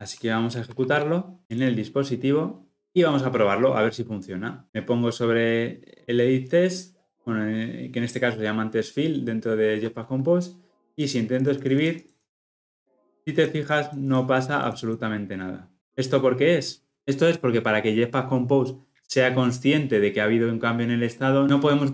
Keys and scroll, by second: 0.7 shift+F10.